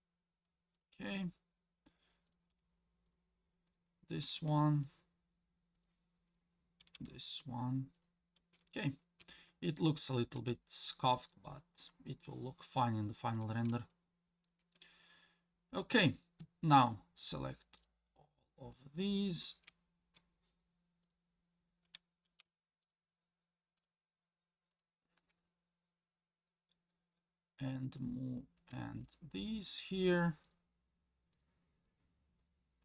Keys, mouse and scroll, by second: 2.3 click, 2.5 g, 3.7 click, 4.2 g, 6.3 click, 6.8 g, 9.5 shift+middle click, 10.5 shift+middle click, 11.1 shift+middle click, 12.3-13.4 shift+scroll down 1, 13.9 shift+middle click, 17.8 click, 21.0 click, 22.8 shift+click, 23.8 shift+click, 24.7 shift+click, 27.7-28.7 scroll down 1, 29.0 shift+click, 29.7 shift+click, 30.4 shift+click, 31.3 shift+click, 31.9 shift+click, 32.4 shift+click.